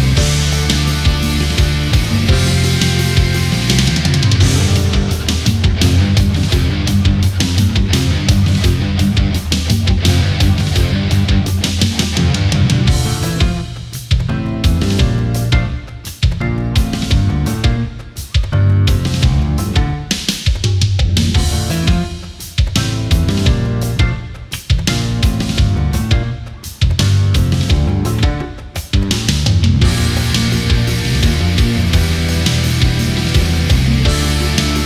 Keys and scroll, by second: 0.0 ctrl+z, 1.1 Delete, 2.3 Delete, 3.5 ctrl+z, 7.0 Delete, 7.7 ctrl+-, 8.4 ctrl+=, 9.0 ctrl+0, 14.8 ctrl+z, 25.5 ctrl+-, 26.2 ctrl+z, 27.7 ctrl+0, 33.7 shift+Up.